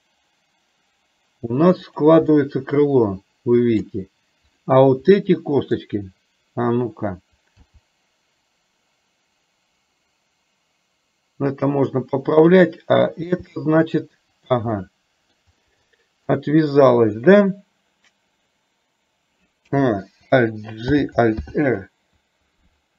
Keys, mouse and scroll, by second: 2.5-3.9 middle drag, 5.3-5.9 middle drag, 7.8 g, 13.4 g, 14.8-15.5 middle drag, 15.9-16.4 shift+middle drag, 21.0 alt+g, 21.5 alt+r.